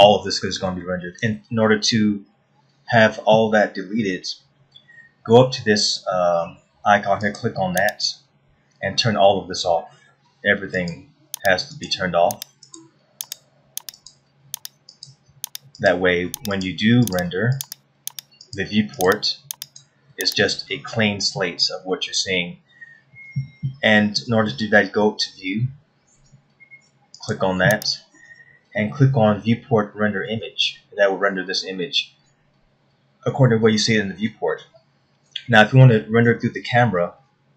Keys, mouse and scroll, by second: 8.3 click, 21.6 scroll up 2, 22.5 scroll up 1, 29.2 click.